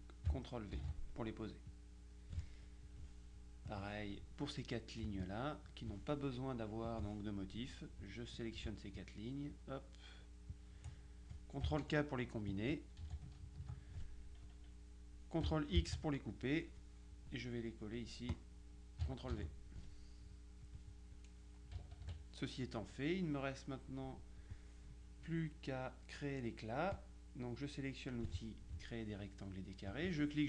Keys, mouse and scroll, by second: 0.9 ctrl+v, 1.8 click, 3.7 click, 5.1 z, 5.3 click, 6.9 click, 8.5 click, 10.6 click, 13.1 ctrl+k, 15.9 ctrl+x, 16.7 click, 17.5 middle click, 18.4 click, 19.4 ctrl+v, 20.7 click, 21.9 KP_Subtract, 22.9-24.1 drag, 27.0-28.8 drag, 30.0-30.4 drag.